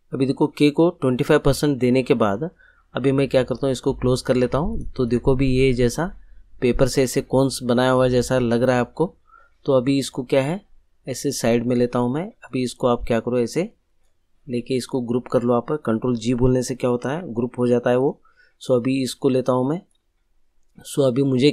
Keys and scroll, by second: 17.0 ctrl+g.